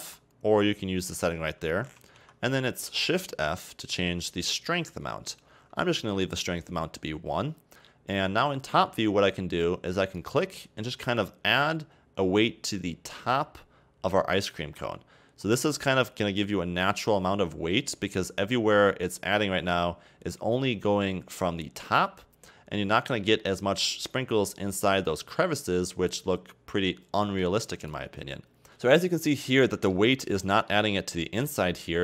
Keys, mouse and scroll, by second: 0.1 f, 3.3 shift+f, 8.5-10.2 scroll down 1, 10.2-13.2 drag, 28.7 middle drag, 29.4 scroll down 1, 29.7-30.0 middle drag, 30.0-30.5 scroll up 2, 30.5-30.9 middle drag, 30.9-31.2 scroll up 3, 31.2-32.0 middle drag.